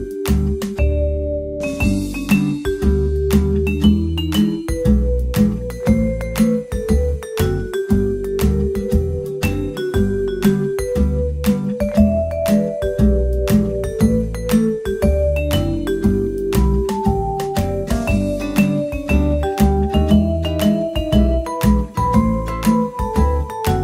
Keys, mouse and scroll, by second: 0.7-2.8 drag, 1.7 t, 3.0 Tab, 4.1 a, 5.9 o, 6.3 click, 6.7 a, 7.4 a, 8.7 z, 9.8 b, 13.0 x, 13.8 z, 14.2 middle click, 14.9 Tab, 17.0-18.7 drag, 20.1-21.6 drag, 21.2 Tab, 21.7 click, 22.1 a, 23.1-23.8 drag.